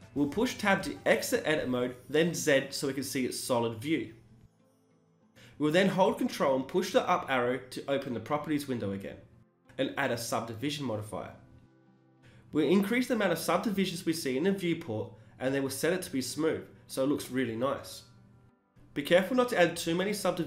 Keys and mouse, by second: 1.0 z, 6.4 ctrl+Up, 9.4-16.3 drag, 13.6-14.3 middle drag, 14.4 t, 16.3 t, 16.4-17.3 drag, 16.4 n, 17.3-17.7 middle drag, 17.5 drag, 18.7 middle drag, 18.8 click, 18.9 middle click, 19.0-20.4 drag, 19.5 Tab.